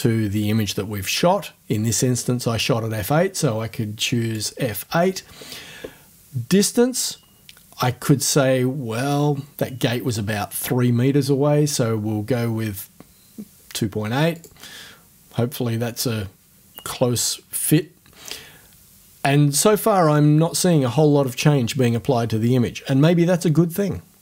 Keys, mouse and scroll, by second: 4.3 click, 6.6 click, 14.4 click.